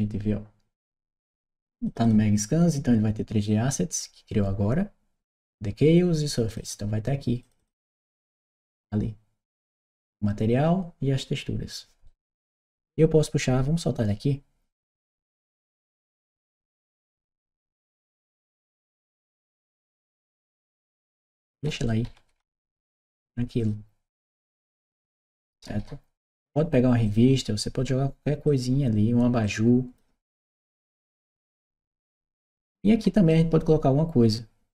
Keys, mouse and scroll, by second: 1.7 click, 1.9 click, 6.3 click, 7.2 click, 11.9-13.9 right drag, 15.2-17.0 drag, 18.6 click, 19.6-21.5 drag, 21.7-23.1 right drag, 23.4 click, 24.3-26.0 right drag, 24.9 a, 26.9 click, 28.3 click, 29.2 click, 30.3 click, 31.7-33.1 right drag, 31.8 s.